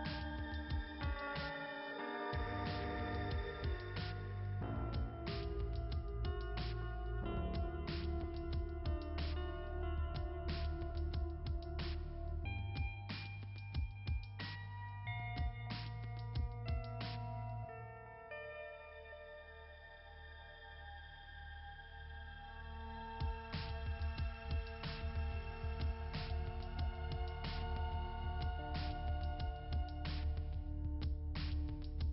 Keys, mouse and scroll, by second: 0.5 click, 2.3 click, 5.0 click, 6.3 click, 8.0-8.9 scroll up 2, 12.1-12.5 scroll down 1, 14.2-15.3 scroll up 2, 15.3 click, 16.2 right click, 17.3 click, 17.5 click, 19.3 right click, 20.7 right click, 22.0 click, 23.8 scroll up 2, 24.0 scroll down 1, 24.1 scroll up 1, 24.2 scroll down 1, 24.4 scroll up 1, 24.4 scroll down 1, 24.7 scroll up 1, 24.9 scroll down 1, 25.3 scroll up 1, 25.9 scroll up 1, 26.0 scroll down 1, 26.2 scroll up 1, 26.7 scroll up 1.